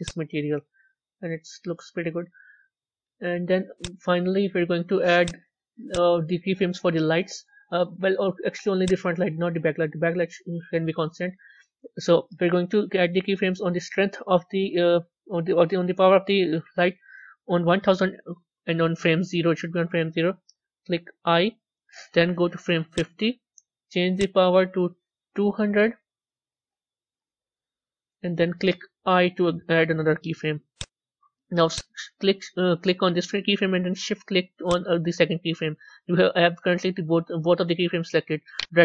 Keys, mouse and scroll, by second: 0.0-4.2 drag, 5.9-7.0 drag, 7.0-8.8 middle drag, 8.8 click, 21.2 i, 22.8-27.0 drag, 27.0 Left, 28.9 i, 30.6 click, 31.6 click, 34.5 shift+click.